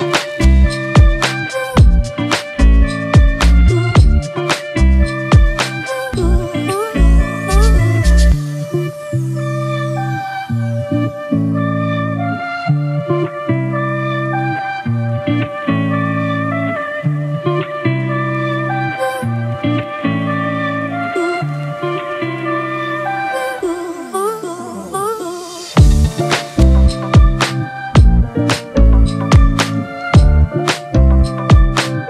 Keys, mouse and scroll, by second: 2.4 right click, 3.8 double click, 6.0-7.6 typing, 7.9 double click, 9.6 typing, 13.7 double click, 15.1-15.4 typing, 15.6 double click, 24.4 right click, 26.2-27.2 typing, 27.2 double click.